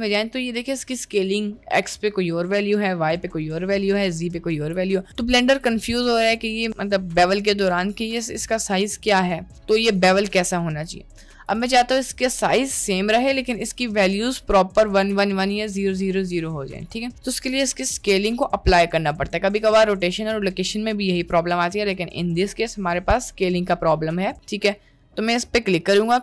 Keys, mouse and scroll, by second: 4.6 n, 5.3 `, 9.4 middle click, 10.2 Tab, 11.1 click, 11.9 Tab, 14.9 n, 24.3 middle drag.